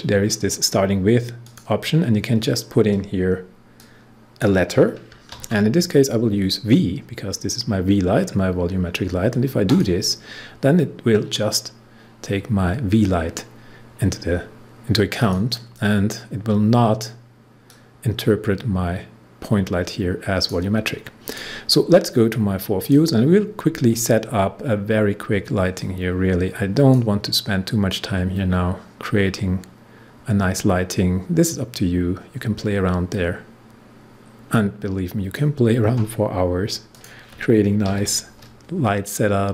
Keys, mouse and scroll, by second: 1.4 click, 3.7-5.3 drag, 5.3 shift+v, 9.7 click, 15.1 click, 17.6-21.2 drag, 25.7-36.9 drag, 37.8 ctrl+d.